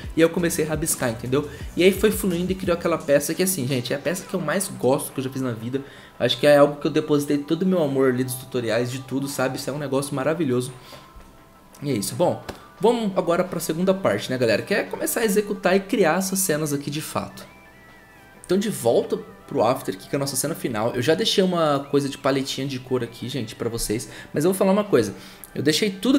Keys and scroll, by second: 18.2 F2.